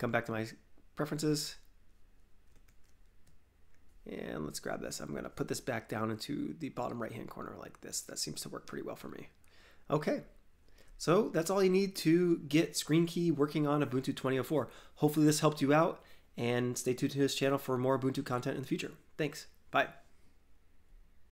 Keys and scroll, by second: 8.6 alt+Tab.